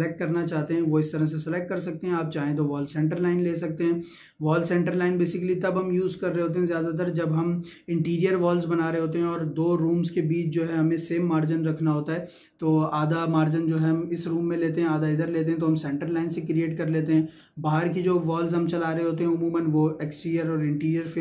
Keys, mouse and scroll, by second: 3.2 click.